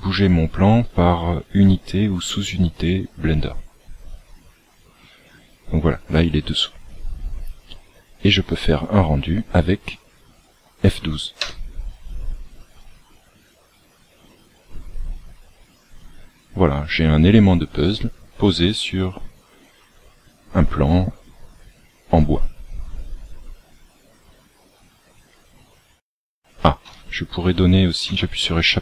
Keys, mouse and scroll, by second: 6.6-7.8 scroll down 7, 9.9-11.3 scroll down 1, 28.0 Escape.